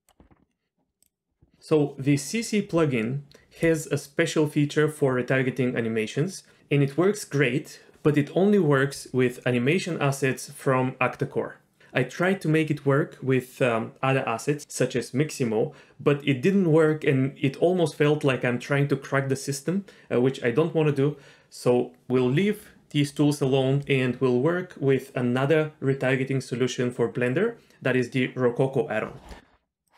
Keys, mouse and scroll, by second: 1.0 click, 23.1 click.